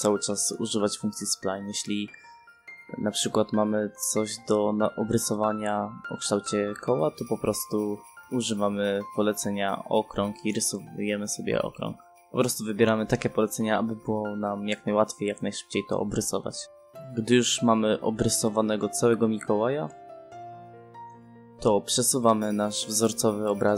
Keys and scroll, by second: 0.5 Escape, 1.9 c, 2.4 space, 23.5 space.